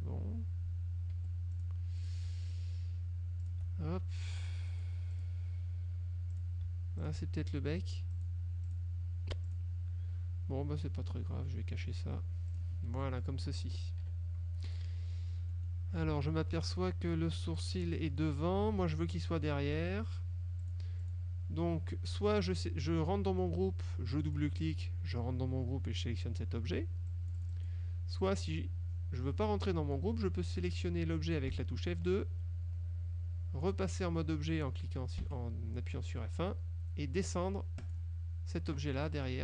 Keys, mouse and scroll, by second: 1.2 F1, 1.6 click, 2.1 click, 2.6 shift+click, 3.5 shift+click, 4.8 click, 5.2 click, 6.4 click, 7.1 shift+click, 8.2 click, 8.8 click, 9.6 click, 10.9 click, 12.6 click, 13.0 F1, 14.1 KP_Subtract, 15.2 click, 15.6 click, 16.1 click, 16.5 F2, 16.7 click, 17.7 click, 18.8 ctrl+z, 19.9 F1, 20.8 click, 21.2 click, 24.2 click, 24.8 click, 27.2 click, 28.3 click, 31.6 F2, 32.2 click, 35.3 F1, 37.9 click.